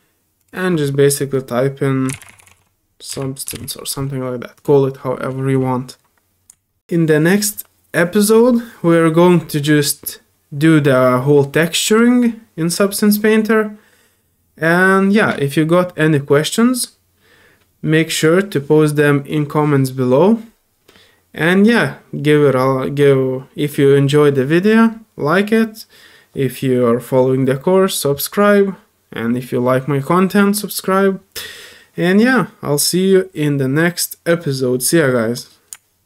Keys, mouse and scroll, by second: 15.2 typing.